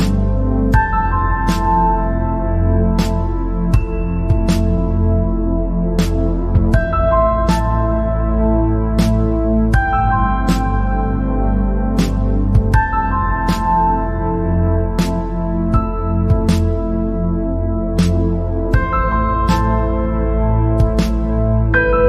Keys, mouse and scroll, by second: 2.8 scroll up 3, 3.2 scroll down 2, 3.8 KP_0, 4.9 KP_0, 5.5 KP_0, 7.0 click, 8.4 g, 9.2 Escape, 9.8-10.1 scroll down 3, 10.3 click, 10.8 scroll up 2, 11.9 KP_0, 12.7-13.0 scroll down 2, 13.0-13.3 scroll up 2, 13.4 scroll down 1, 13.5-16.6 middle drag, 16.6 scroll up 2, 17.7-19.4 drag, 19.4-19.9 scroll down 3, 19.9 scroll up 2, 20.2-20.5 scroll down 1, 20.5 middle click, 21.4 scroll up 2.